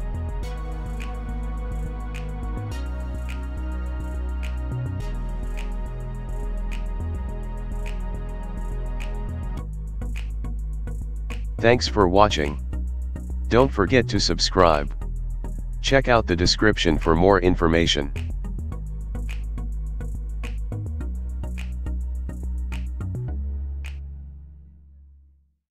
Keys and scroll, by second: 2.9 Tab, 4.6-6.7 typing, 10.3 ctrl+2.